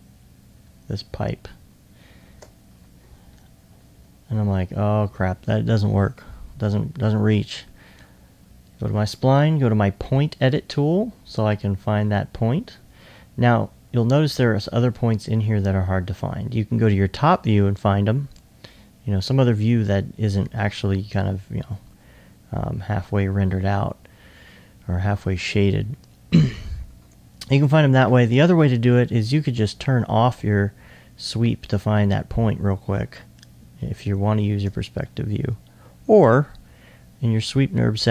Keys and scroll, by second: 2.8-3.4 typing, 6.4 2.